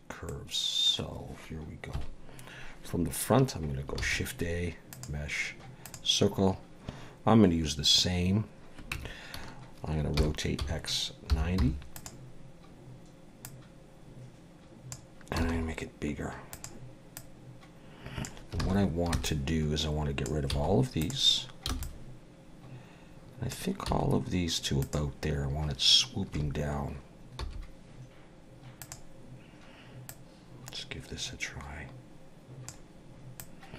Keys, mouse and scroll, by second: 0.3 middle click, 1.9 KP_1, 4.0 shift+a, 8.9 Tab, 10.1 r, 13.4 click, 15.4 s, 17.1 click, 18.6 alt+a, 19.1 b, 20.5 x, 21.7 b, 23.9 x, 26.3 a, 27.4 s, 30.1 click, 33.4 click.